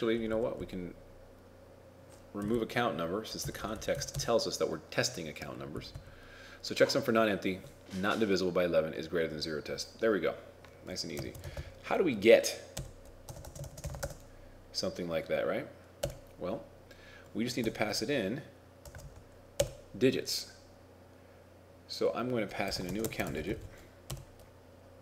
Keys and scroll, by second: 11.3 shift+a, 23.1 shift+a.